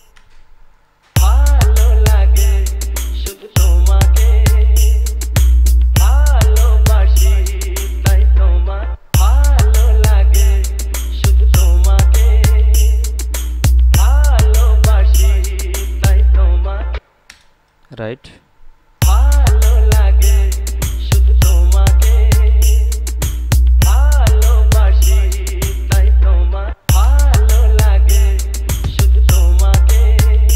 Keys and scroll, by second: 0.1 space, 1.3 space, 9.1 space, 17.1 space, 19.2 space, 27.0 space.